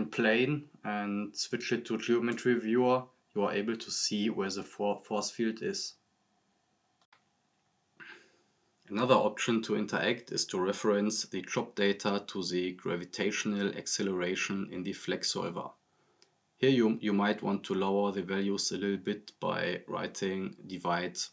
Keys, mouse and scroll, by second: 1.1 drag, 2.8 click, 3.0-3.6 scroll up 1, 5.4 click, 6.3 click, 7.5 scroll down 1, 9.3 drag, 13.7-16.0 drag, 20.0-21.3 drag.